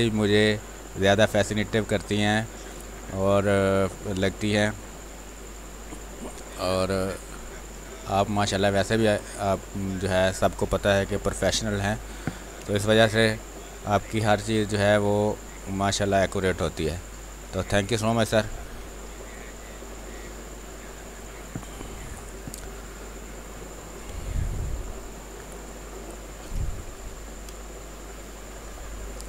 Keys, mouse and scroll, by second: 6.3 space, 6.4 click, 6.8 space, 7.3-10.2 drag, 10.2 space, 10.6 r, 10.8-12.3 drag, 12.3 b, 12.6 space, 12.8 click, 13.1 space, 14.2-18.6 drag, 18.6 space, 18.8-22.5 alt+drag, 22.5 r, 23.0 click, 23.8 b, 24.2 space, 24.4 ctrl+click, 27.5 space, 28.4 ctrl+click.